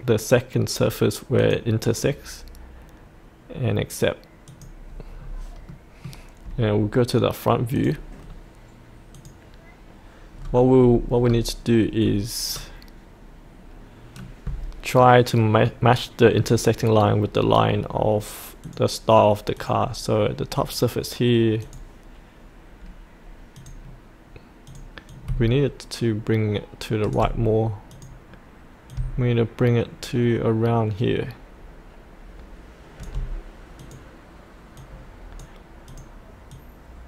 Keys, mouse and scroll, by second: 0.7 click, 5.1-5.7 scroll up 1, 5.7-6.8 middle drag, 7.7 click, 8.2-9.1 scroll down 1, 9.1 click, 10.3-11.2 scroll down 1, 12.5-18.6 scroll down 1, 18.6-27.1 drag, 27.9-30.1 drag, 30.2-33.0 drag, 33.8-37.0 drag.